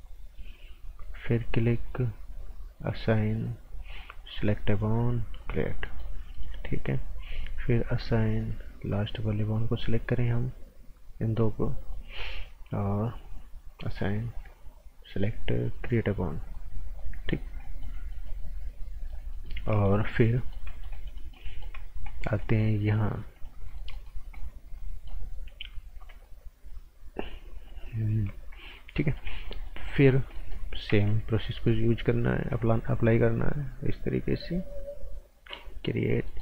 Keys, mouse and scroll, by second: 2.9 click, 5.8 right click, 6.3 right click, 7.9 click, 16.8 scroll down 1, 17.0 right click, 17.4 scroll down 1, 17.6 right click, 18.4 scroll up 1, 18.6 right click, 19.7 right click, 21.8-22.1 scroll up 1, 22.1 right click, 23.3 click, 23.6 right click, 24.2 scroll down 1, 24.3 right click, 28.8 scroll up 1, 28.9 right click, 30.9 a, 31.5 right click, 32.6 click, 36.2 right click.